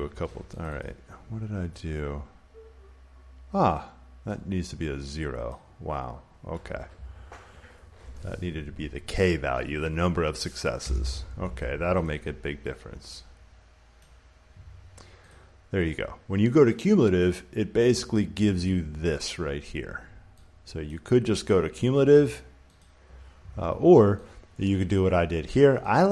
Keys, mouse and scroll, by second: 0.5 click, 5.3 click, 7.4 click, 10.7 Return, 12.0 click, 13.9 click, 15.2 click, 15.8 click, 19.5 click, 20.8 click, 22.0 click, 22.7 click, 24.5 click.